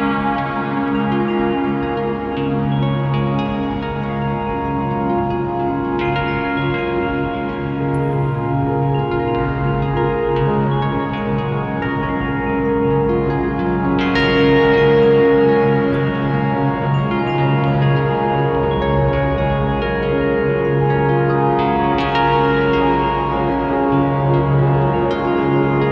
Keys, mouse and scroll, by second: 1.0-1.9 drag, 2.2 Delete, 3.1 ctrl+shift+click, 4.6-5.0 scroll up 1, 5.5 click, 6.3-7.7 drag, 8.3 shift+d, 8.9 click, 9.5-13.7 drag, 10.3 scroll down 1, 10.6-11.3 scroll up 1, 13.7 shift+a, 15.2 scroll up 1, 15.9-21.0 drag, 16.3 scroll down 1, 17.6-18.0 scroll up 1, 22.9-25.9 drag, 24.0 scroll down 1.